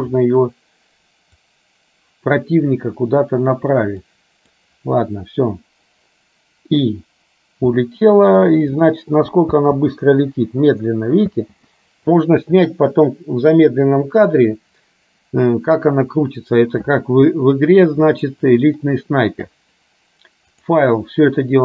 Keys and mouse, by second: 1.5-2.7 drag, 4.2 click, 9.7 space, 12.3 click, 20.7-21.6 drag.